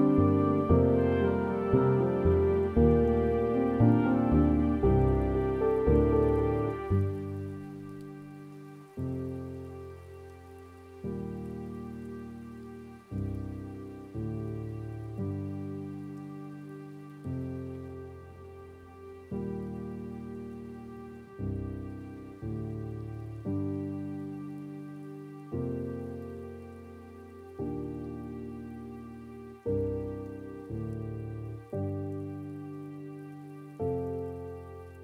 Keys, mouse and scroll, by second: 0.7-13.9 drag, 15.5 click, 16.9-19.3 drag, 19.3 middle click, 19.7-20.1 scroll down 3, 20.1-20.5 scroll up 5, 20.5 middle click, 21.3-22.6 drag, 22.6-23.3 scroll down 2, 23.3 scroll down 1, 23.5 middle click, 24.3-26.6 drag, 26.6-27.0 scroll up 2, 27.0 scroll down 2, 27.6 click, 28.3 middle click, 28.6-29.5 scroll down 3, 29.5-32.6 drag, 32.6-33.6 scroll up 6, 32.7 middle click, 33.6-35.0 middle drag.